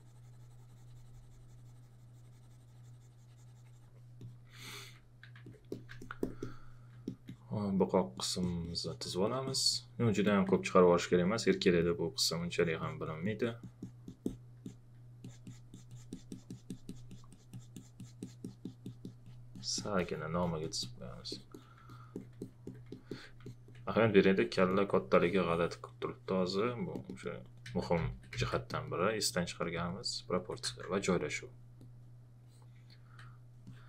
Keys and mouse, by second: 4.2 click, 6.0 alt+click, 10.3 alt+click, 11.2 alt+click, 21.3 alt+click, 21.9 alt+click, 22.8 alt+click, 23.4 alt+click, 24.7 alt+click, 27.6 ctrl+z, 28.7 ctrl+click, 30.6 w, 31.4 alt+click.